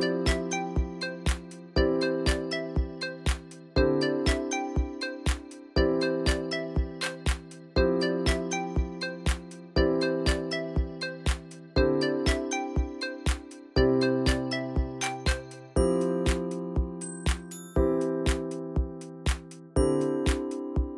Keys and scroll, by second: 1.6 alt+shift+Down, 1.9 Up, 7.0 Down, 7.1 Down, 7.1 Down, 10.8 ctrl+3, 11.0 Return, 12.2 4, 12.3 Return, 12.9 4, 13.0 Return, 13.6 4, 13.7 Return, 14.6 Delete, 16.4 alt+Down, 17.1 Up, 17.1 Up, 17.2 Up, 18.7 Down, 20.7 ctrl+alt+Down.